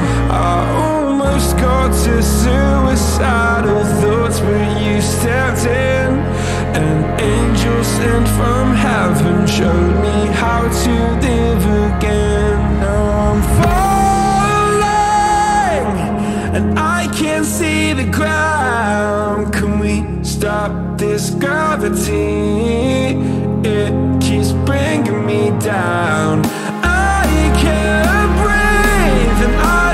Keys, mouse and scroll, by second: 9.4-10.5 drag, 10.5-12.8 ctrl+middle drag, 12.8-16.4 drag, 21.6-25.0 ctrl+middle drag, 25.0 click, 27.1-29.9 drag.